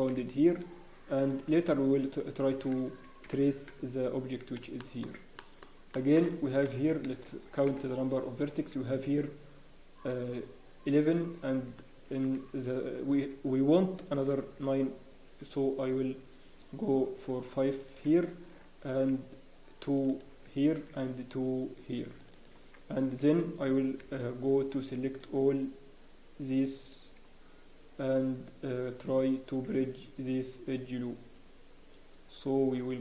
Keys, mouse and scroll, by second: 0.1 f, 0.4-1.3 scroll down 1, 1.3 click, 1.6 shift+click, 2.6 shift+click, 3.2-4.3 scroll down 1, 3.2 f, 4.3 scroll down 1, 4.8 shift+middle click, 5.3 shift+middle click, 6.2 shift+middle click, 6.2 scroll up 1, 6.6-6.9 scroll down 2, 6.6 a, 7.7 b, 12.2 alt+a, 14.4 ctrl+r, 18.3 click, 18.8 ctrl+r, 20.0 click, 20.7 ctrl+r, 22.3 click, 23.2 alt+a, 24.0 b, 29.0 right click.